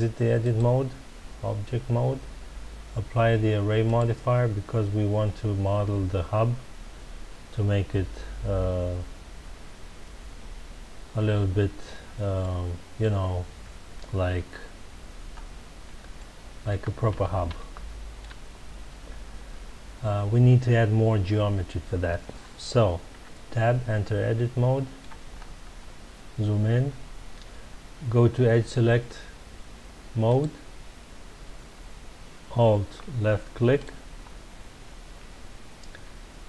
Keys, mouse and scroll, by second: 3.8-6.8 drag, 12.4-14.3 middle drag, 14.3 Tab, 15.2 scroll up 2, 15.9 Tab, 16.1-16.6 middle drag, 16.6 Tab, 17.5-20.5 shift+middle drag, 23.1 Tab, 24.3-25.3 middle drag, 25.3-25.6 scroll up 2, 30.2 click, 33.7 alt+click, 35.0 scroll down 1.